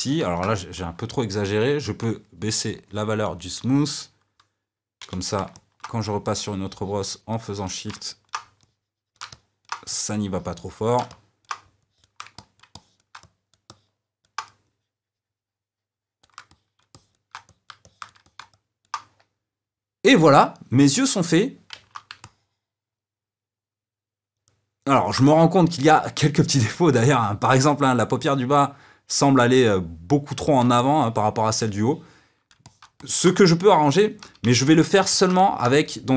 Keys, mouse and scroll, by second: 0.2 ctrl+z, 2.0-5.0 drag, 5.0 c, 5.5 middle click, 6.3-7.9 shift+drag, 7.9 middle click, 8.5 shift+click, 9.2 middle click, 9.8-11.0 shift+drag, 11.0 middle click, 11.8 shift+click, 12.3-14.6 middle drag, 14.6-16.4 shift+drag, 16.4-34.2 middle drag, 34.2 g, 35.0-36.1 ctrl+middle drag.